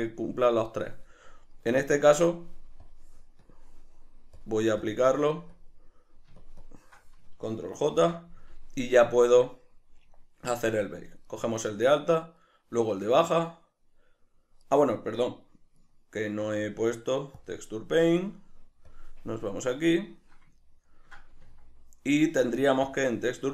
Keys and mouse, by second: 1.8 click, 2.8-3.5 drag, 4.4 click, 4.8 click, 5.5 click, 6.3 shift+click, 6.6 shift+drag, 7.9 ctrl+j, 9.2 right click, 11.2 right click, 12.4 shift+right click, 14.6 right click, 15.8 right click, 16.4 Tab, 18.9 drag, 20.2-23.5 middle drag, 21.4 Tab.